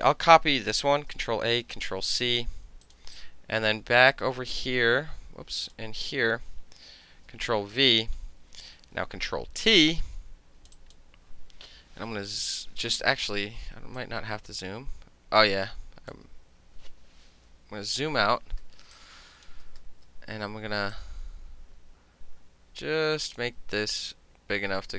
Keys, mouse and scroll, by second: 1.1 ctrl+a, 1.9 ctrl+c, 2.9 click, 5.7 click, 9.0 ctrl+t, 9.7-10.7 drag, 10.8 click, 12.2-14.0 ctrl+middle drag, 14.0-16.2 drag, 16.4 ctrl+z, 17.8 ctrl+-, 18.7 space, 19.0 click, 19.8 space, 21.0-23.4 drag, 24.0-24.9 drag.